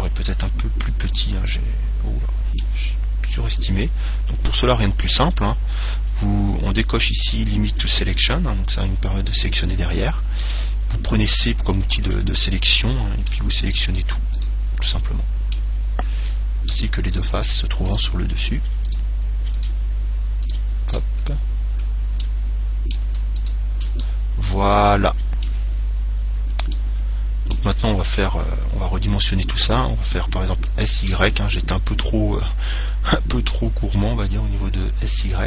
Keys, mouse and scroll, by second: 0.7-1.3 scroll up 1, 1.3-3.1 middle drag, 4.0-5.7 scroll down 1, 5.7-6.1 scroll down 1, 8.1 click, 10.7 c, 14.7 right click, 15.1-17.0 middle drag, 17.4-22.5 right drag, 21.4-24.2 middle drag, 23.6 right click, 24.5 middle click, 24.8-28.7 middle drag, 26.0-27.0 scroll down 1, 29.2-31.3 middle drag, 30.9 s.